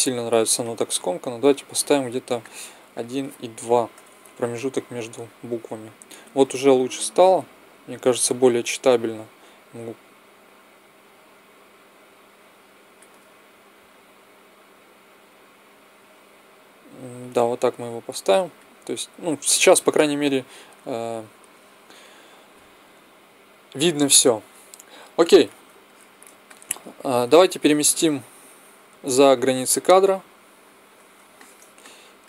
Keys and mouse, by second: 1.6 middle click, 2.3-4.3 drag, 6.7-8.5 drag, 13.8-15.7 drag, 25.8 middle click, 27.8-29.5 drag.